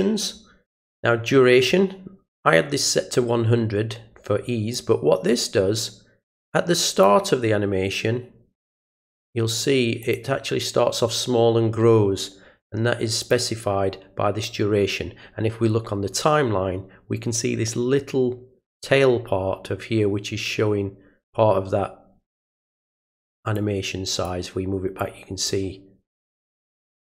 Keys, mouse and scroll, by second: 4.7-7.0 drag, 8.6 click, 10.0 click, 13.2 click, 23.5 click, 25.0 click, 26.5-27.1 drag.